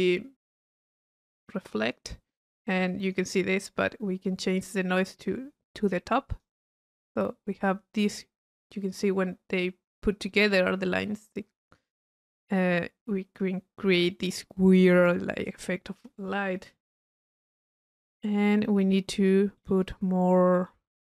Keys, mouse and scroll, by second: 1.8 click, 2.9 click, 3.5 click, 6.3 click, 8.0 click, 15.0-15.5 drag, 19.6 right click, 20.6 right click, 21.1 click, 21.1 right click.